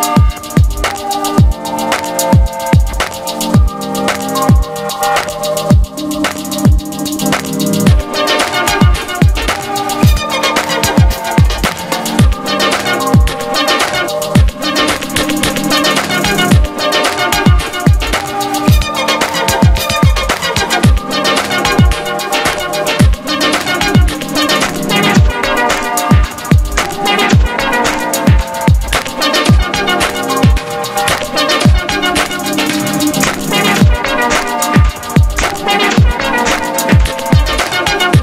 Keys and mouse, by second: 0.1 middle click, 0.2 Tab, 0.6 g, 4.8 a, 5.5-7.4 middle drag, 7.4 alt+s, 7.7 a, 7.9 click, 8.0 Tab, 8.2 Tab, 8.5 click, 8.8 h, 13.2 middle click, 13.5 s, 14.4 middle click, 14.7 s, 15.1 middle click, 15.2 Tab, 15.3 z, 15.4 ctrl+t, 16.4 middle click, 16.6 s, 18.1 z, 18.5 s, 18.9 s, 19.3 g, 20.1 click, 20.4 r, 21.1 click, 21.7 s, 22.1 click, 22.4 g, 23.2 ctrl+a, 23.7-25.5 drag, 25.5 g, 25.9 click, 27.7 g, 31.5 ctrl+z, 32.3 ctrl+z, 32.6 a, 32.9 alt+m, 33.5 ctrl+a, 35.9 g, 36.4-37.4 middle drag, 37.6 a.